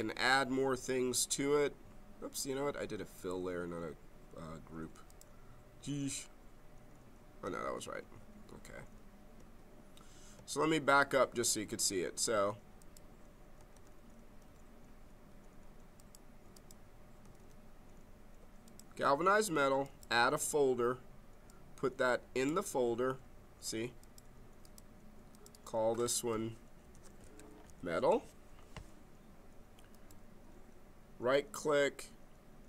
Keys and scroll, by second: 7.6 ctrl+z, 10.6 ctrl+z, 13.7 ctrl+z, 17.3 ctrl+z, 26.6-28.1 typing.